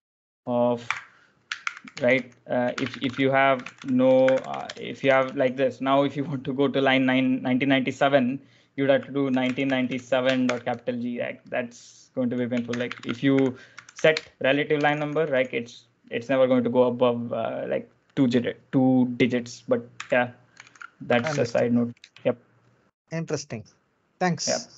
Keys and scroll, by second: 0.7-5.5 typing, 8.8-10.3 typing, 12.5-15.7 typing, 19.8-22.2 typing, 22.2 super+Tab.